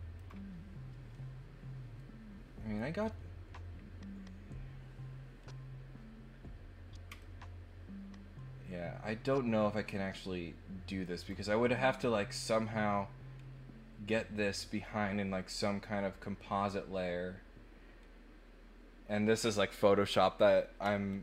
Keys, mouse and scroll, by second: 7.1-11.0 ctrl+middle drag, 21.1-21.2 ctrl+middle drag.